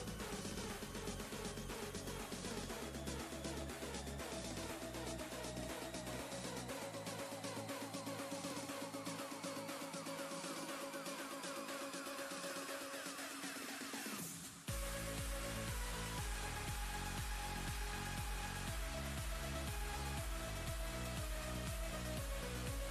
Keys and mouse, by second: 3.9 click, 8.5-12.1 typing, 13.1 space, 14.4 typing, 16.1-18.0 typing, 19.8 Down, 20.6 Return.